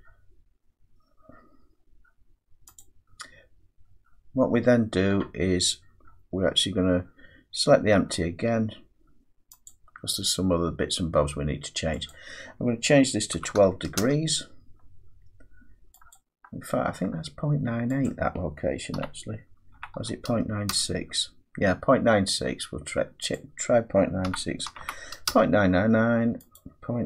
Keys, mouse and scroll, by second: 1.6 scroll, 2.8 click, 3.8-4.5 scroll, 4.5-5.8 scroll, 5.8-7.0 scroll, 7.0-7.7 scroll, 7.7-8.5 scroll, 8.5-9.7 scroll, 9.7 click, 12.1 click, 13.3-14.0 typing, 15.9-16.6 typing, 16.1 click, 18.1 click, 18.7-20.7 typing, 23.3 click, 24.0-25.3 typing, 26.6 click.